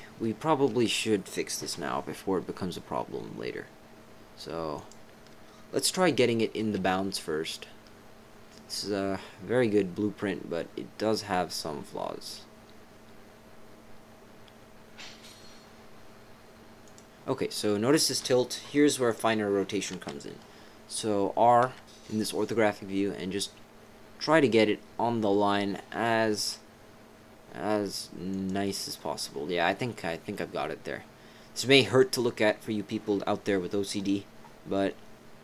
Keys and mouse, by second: 1.0 click, 4.7 click, 6.6 g, 19.1 click, 21.6 r.